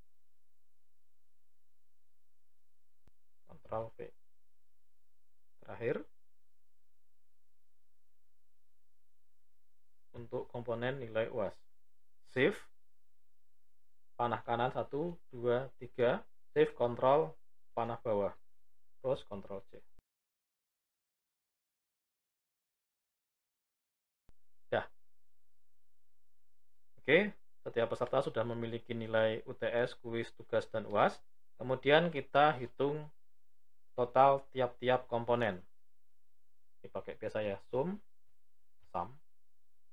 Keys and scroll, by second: 3.6 ctrl+v, 12.3 shift+Right, 18.9 ctrl+c, 23.9 ctrl+v.